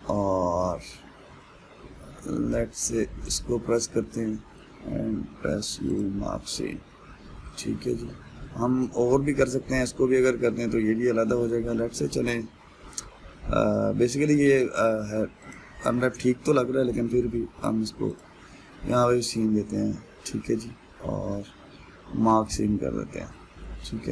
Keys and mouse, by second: 3.5 alt+click, 4.0-6.6 middle drag, 6.6 u, 7.3-16.1 middle drag, 16.1 alt+click, 16.6-18.8 middle drag, 18.8 u, 20.0-22.9 middle drag.